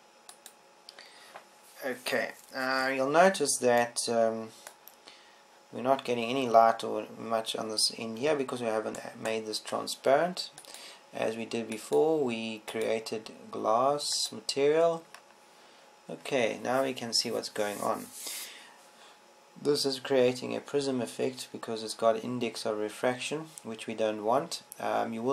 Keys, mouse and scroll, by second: 3.0-4.2 drag, 5.7-7.6 middle drag, 10.5-12.3 right drag, 12.3-15.8 drag.